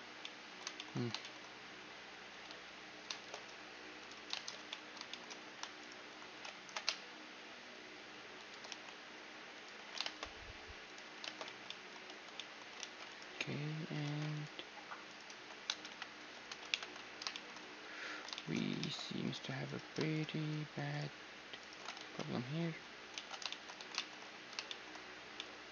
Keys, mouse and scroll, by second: 2.2 z, 2.8 shift+space, 3.6-6.9 drag, 3.9 shift+space, 4.1 z, 4.3-8.0 middle drag, 5.4 right click, 6.2 ctrl+b, 8.3 t, 9.2-12.6 drag, 9.4 t, 9.7 shift+space, 10.9 shift+space, 11.1 Tab, 11.3 right click, 11.7 Tab, 12.3-13.9 middle drag, 12.6 ctrl+r, 12.8-14.7 right drag, 13.9 ctrl+r, 14.9 ctrl+z, 15.5 KP_1, 16.3 ctrl+KP_3, 17.0-20.9 middle drag, 17.8 a, 18.4 ctrl+Tab, 19.3-23.1 right drag, 21.6 ctrl+x, 21.9-25.7 middle drag, 22.8 ctrl+z, 23.4 a.